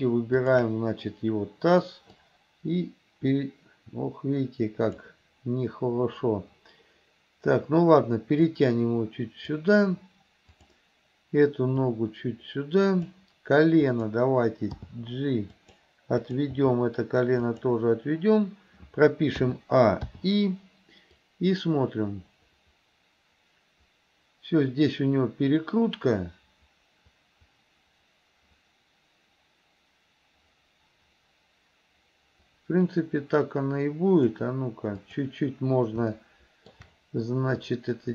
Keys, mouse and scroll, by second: 0.5 shift+click, 2.2-5.1 drag, 8.4-9.7 drag, 10.5 click, 11.9-13.2 drag, 13.8 click, 14.8 g, 16.3 click, 16.5 g, 19.5 a, 20.2 i, 21.3-34.4 drag, 35.0 click, 36.2-36.8 shift+middle drag, 37.8-38.1 drag.